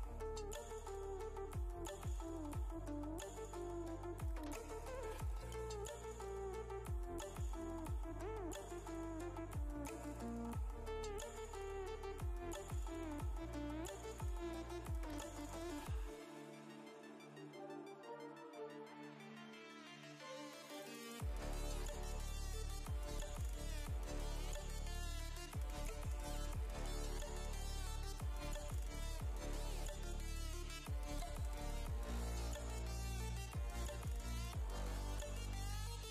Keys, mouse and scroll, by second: 3.7 click, 7.3-11.2 typing, 12.9 click, 15.3 ctrl+t, 16.1-25.2 drag, 27.2 right click, 29.3 click, 34.7 ctrl+t.